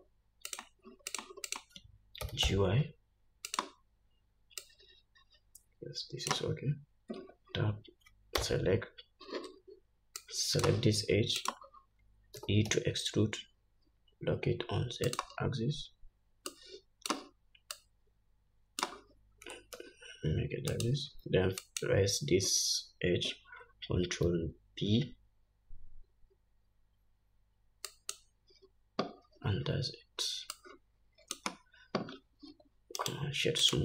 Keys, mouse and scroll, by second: 0.9 click, 1.5 click, 1.9 click, 2.7 g, 5.1-11.9 drag, 7.6 Tab, 8.8 2, 12.8 e, 17.0-21.3 drag, 19.9 g, 22.1 click, 25.3 ctrl+b, 31.0-33.8 drag, 33.0 Tab, 33.4-33.8 right drag.